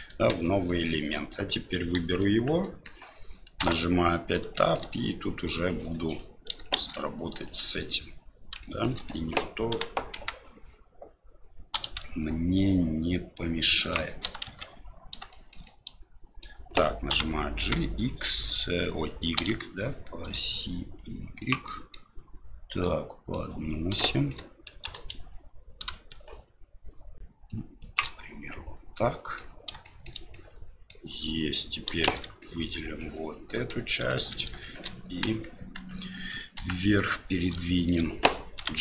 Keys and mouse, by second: 0.3 Tab, 0.7 middle click, 1.0 right click, 1.9 KP_1, 2.6 KP_3, 3.6 Tab, 4.5 shift+middle click, 5.8 click, 6.7 shift+z, 7.4 click, 8.6 shift+middle click, 9.7 g, 14.5 shift+z, 15.4 shift+middle click, 15.7 middle click, 17.1 g, 21.8 middle click, 23.0 middle click, 24.1 shift+middle click, 24.7 g, 29.1 middle click, 29.9 shift+middle click, 30.3 middle click, 32.0 shift+z, 32.5 middle click, 33.1 click, 34.1 shift+z, 34.6 shift+middle click, 35.2 KP_1, 36.5 KP_3, 37.6 shift+middle click, 38.5 g.